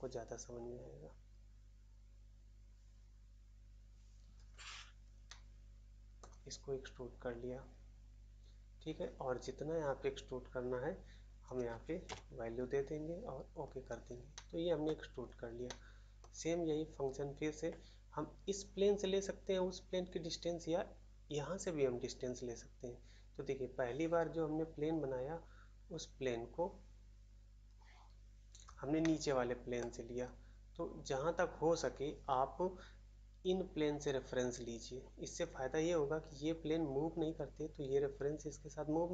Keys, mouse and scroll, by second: 5.2 middle click, 6.2 middle click, 12.0 Return, 12.0 typing, 14.3 middle click, 14.3 middle click, 14.8 middle click, 15.4 scroll up 1, 15.6 middle click, 16.1 middle click, 29.0 middle click, 29.8 middle click, 31.4 scroll up 1.